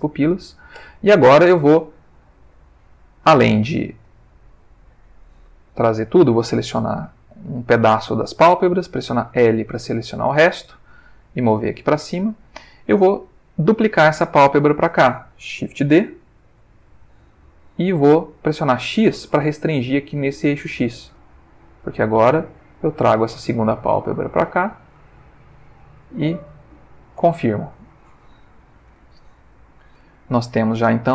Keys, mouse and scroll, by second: 0.8 Tab, 2.7 click, 4.1 click, 6.4-6.9 drag, 9.3 l, 10.3-12.5 drag, 16.7 shift+d, 21.1 x, 26.7 shift+click, 29.9 Tab, 30.5 ctrl+middle click.